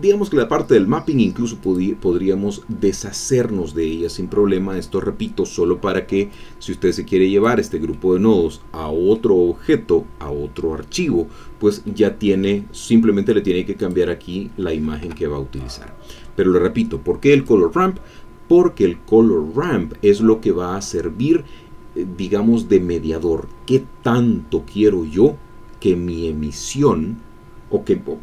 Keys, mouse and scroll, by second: 1.6 click, 4.5 middle click, 6.3-7.9 drag, 7.9-9.4 middle drag, 11.8 middle click, 13.8 click, 15.0 Escape, 15.6 middle click, 17.3 click.